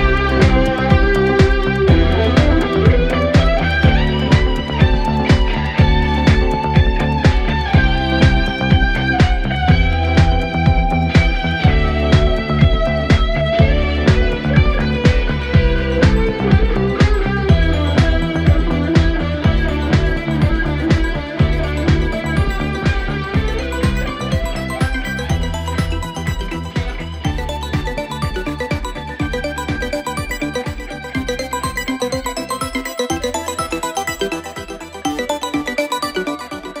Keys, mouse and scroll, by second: 1.9-2.2 drag, 2.2 scroll down 2, 2.6-3.1 drag, 3.1-3.5 scroll down 2, 4.3 scroll up 1, 4.5-4.9 scroll down 2, 5.0 space, 6.1 space, 7.7 click, 8.1 scroll up 4, 8.6-10.4 drag, 10.4 space, 14.9-16.4 drag, 18.4-19.6 scroll down 17, 19.6 click, 20.3-21.2 scroll down 10, 21.2-21.5 scroll down 1, 21.5-23.4 drag, 23.7 space, 24.5-27.0 drag, 28.8-30.9 drag, 30.9-31.3 scroll down 1, 31.3-32.8 drag, 33.6 scroll down 1, 33.7 scroll up 1, 33.8-34.8 scroll down 1, 34.8-36.3 drag, 36.7 click.